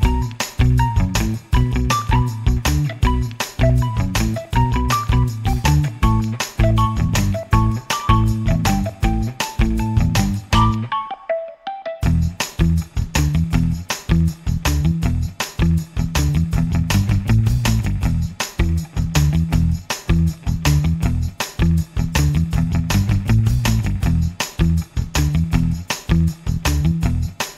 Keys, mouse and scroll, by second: 1.0-1.3 scroll down 1, 2.6-2.9 scroll up 1, 3.6 click, 4.5-9.2 drag, 9.9-12.1 drag, 13.0 KP_Subtract, 15.7 click, 19.9-23.0 drag, 23.3-27.2 drag.